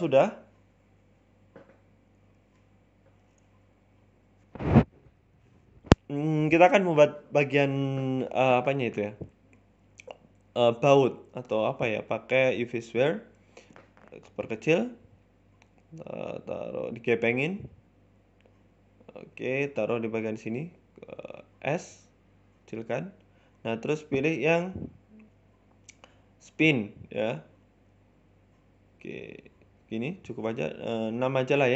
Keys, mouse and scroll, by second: 0.8 KP_1, 2.0-2.3 scroll up 1, 2.3 shift+middle click, 3.1 shift+d, 3.6 ctrl+z, 3.8 Tab, 4.2 a, 4.6 shift+d, 5.7 ctrl+z, 6.1 middle click, 6.7 shift+a, 8.1 shift+s, 8.7 middle click, 8.9 shift+a, 10.8 middle click, 11.2 ctrl+z, 11.3 shift+a, 12.8 middle click, 13.1 s, 14.5 KP_3, 15.2 r, 16.0 s, 17.1 KP_1, 17.5-18.7 scroll up 6, 17.9 z, 19.5 g, 21.9 s, 23.9 click, 28.8 Tab, 29.0-30.2 scroll down 6, 29.2 middle click, 30.2 KP_1, 30.6 scroll up 2, 30.7 shift+middle click, 31.3 shift+d.